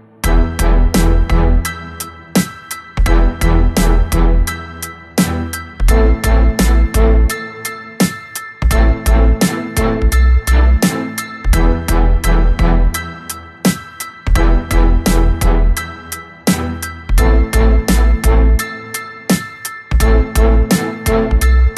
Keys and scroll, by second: 0.8 b, 2.7 b, 9.8 n, 10.8 ctrl+z, 11.6 ctrl+z, 12.0 Escape, 12.6 b, 16.5 Escape, 16.6 2, 17.3 b, 18.8 Escape, 19.1 2, 19.7 b, 21.6 ctrl+z.